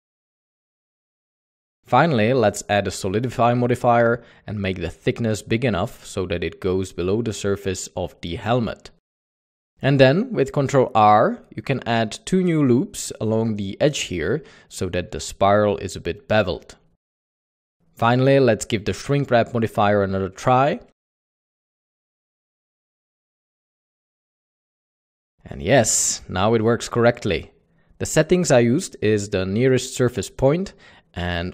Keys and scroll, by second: 0.7 Tab, 1.2 Tab, 10.2 typing, 10.4 Tab, 12.0 ctrl+r, 13.9 Tab, 14.6 alt+a.